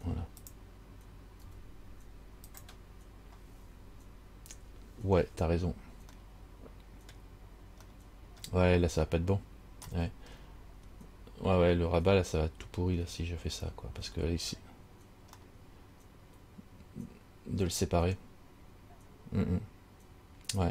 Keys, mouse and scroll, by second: 1.6 g, 5.8-6.4 scroll down 2, 6.4 middle click, 7.3-8.0 scroll down 1, 8.2 middle click, 8.2 scroll up 1, 8.6 scroll down 1, 10.2 middle click, 10.2 scroll up 1, 10.5 scroll down 1, 15.6 middle click.